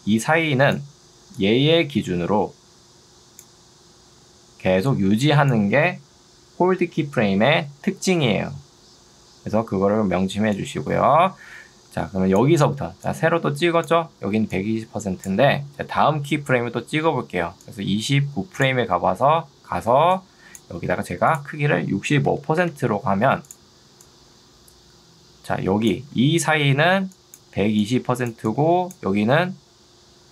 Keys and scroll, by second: 9.8 Escape, 12.8 ctrl+2, 16.0 Escape, 20.0 ctrl+2, 20.8 Escape, 22.0 6, 22.6 Return, 26.2 ctrl+2.